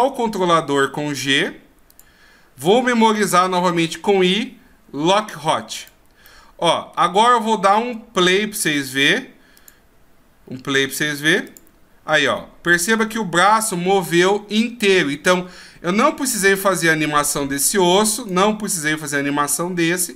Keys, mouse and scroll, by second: 3.7 i, 6.3 middle click, 8.8 click, 9.6 click, 11.5 click, 13.6 click, 16.2 right click, 18.2 right click.